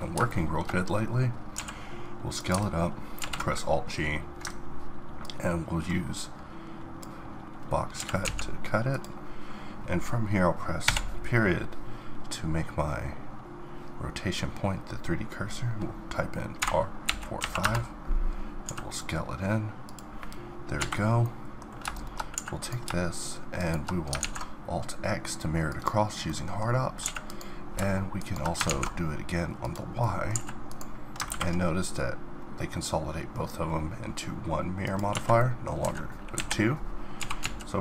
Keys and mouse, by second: 1.6 s, 3.2 alt+g, 7.7 middle click, 7.9 g, 9.0-10.8 middle drag, 10.8 ., 16.6 r, 18.6 s, 21.2-22.3 middle drag, 22.3 a, 23.4 middle click, 24.2 alt+x, 25.2 middle click, 26.3 middle click, 27.0 a, 28.0 middle click, 28.7 alt+x, 29.7 middle click, 30.3 a, 31.3 ctrl+`, 35.4 middle click, 35.8 z, 36.3 KP_1, 37.2 s.